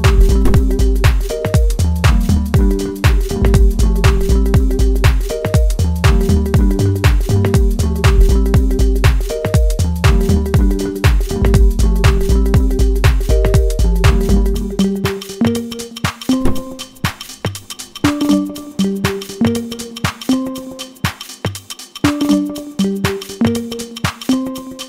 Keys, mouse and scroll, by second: 6.7 click, 11.0 middle click, 12.3-15.7 drag, 15.7-20.0 middle drag, 20.0-20.6 scroll up 2, 20.6-22.3 shift+middle drag, 22.3 click.